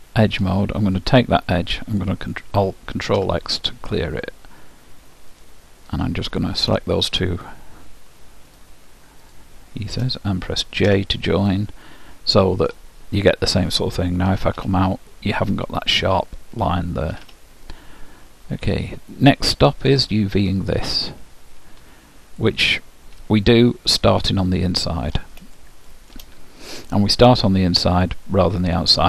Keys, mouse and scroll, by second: 0.9-2.7 drag, 3.3 ctrl+x, 5.5-11.1 drag, 10.9 j, 11.6-13.2 middle drag, 14.4 Tab, 17.2 Tab, 18.3-19.0 scroll up 1, 19.0-20.9 middle drag, 22.5-24.3 drag, 23.5-25.4 middle drag, 25.8-27.5 middle drag, 27.7-29.0 middle drag.